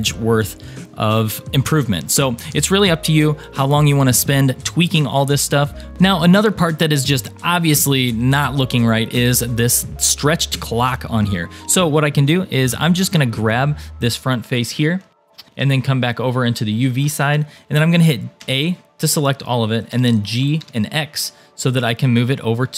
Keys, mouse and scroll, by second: 2.3-5.2 middle drag, 5.9-7.5 middle drag, 5.9 click, 5.9 scroll down 4, 11.2 shift+middle click, 12.5 click, 13.8-15.3 shift+middle drag, 16.0 shift+middle click, 18.4 a, 19.9 g.